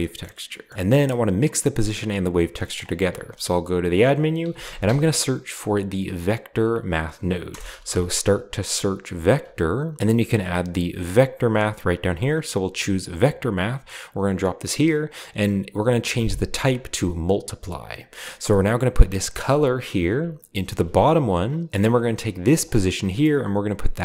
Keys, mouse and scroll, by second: 0.2 middle click, 0.3-0.7 scroll down 1, 0.7 middle click, 1.8-2.6 drag, 3.1 shift+a, 3.9 shift+click, 4.5-4.8 typing, 7.5-7.8 typing, 9.2-9.6 typing, 13.0-15.1 drag, 14.7-15.7 scroll up 1, 15.8-16.9 drag, 17.3-19.0 drag, 17.5-17.9 scroll down 1, 19.4-22.0 drag, 21.7 g, 22.3 click.